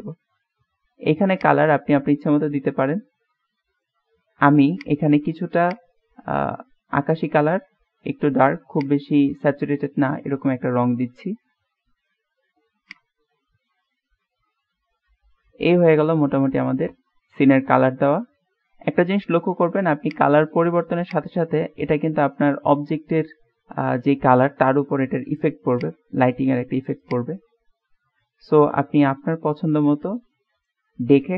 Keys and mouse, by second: 14.7-18.9 middle drag, 20.1 click.